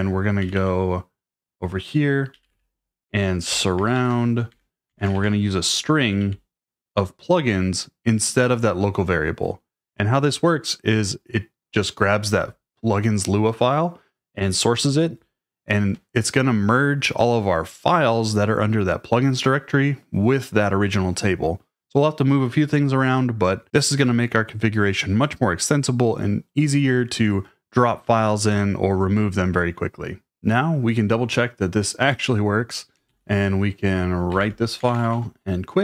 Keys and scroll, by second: 0.0-1.0 typing, 2.1-6.7 typing, 4.5 Escape, 33.1 shift+;, 34.3-35.8 typing, 34.4 Return.